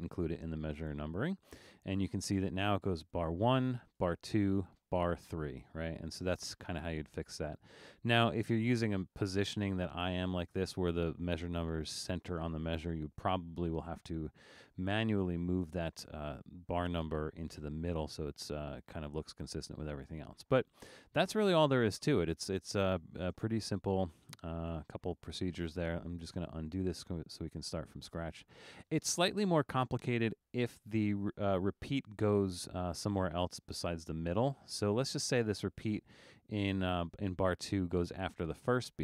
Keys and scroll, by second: 23.3 super+z, 24.0 super+z, 24.7 super+z, 25.9 super+z.